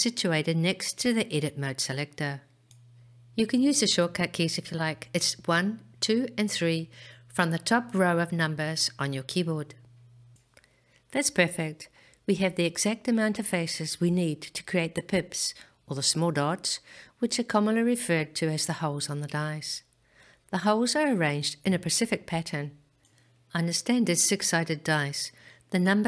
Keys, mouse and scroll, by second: 1.6 click, 7.6-12.0 middle drag.